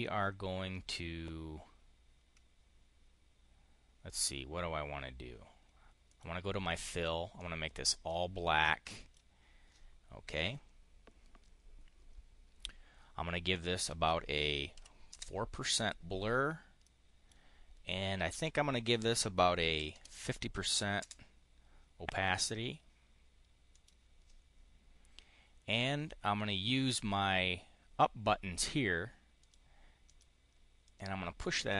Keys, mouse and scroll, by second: 5.9 click, 7.2 click, 8.5 click, 13.3 click, 14.6 4, 14.9 Return, 16.7 click, 19.4-20.3 typing, 20.8 Return, 23.5 click, 29.2 click, 29.9 click, 30.7 click, 31.4 click.